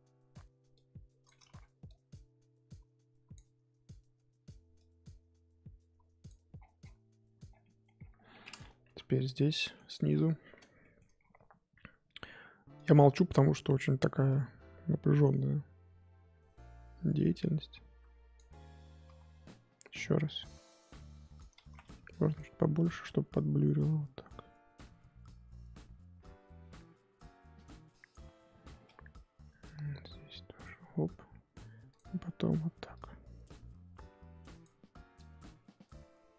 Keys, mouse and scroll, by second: 0.7 click, 1.5 ctrl+z, 1.8-6.5 drag, 6.5-7.4 scroll down 11, 7.4 scroll down 6, 7.6 middle click, 7.9-9.5 scroll up 17, 8.8 KP_1, 9.5 scroll down 1, 9.5 middle click, 10.0 KP_3, 10.8 shift+middle click, 11.0-12.8 scroll up 1, 12.8 click, 13.1-13.5 scroll up 2, 13.5-14.3 scroll down 1, 14.3-19.1 drag, 19.1 ctrl+z, 20.2-21.6 drag, 21.6 ctrl+z, 21.9 f, 23.0-31.9 drag, 32.9-36.3 drag.